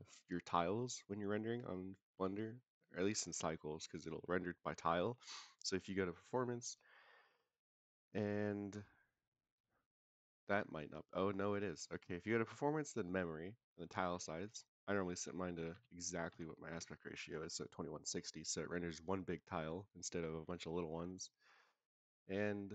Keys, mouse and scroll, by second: 5.9 click, 6.4-7.6 scroll down 2, 7.8-8.9 scroll down 3, 13.6-17.4 drag, 21.7 scroll down 2.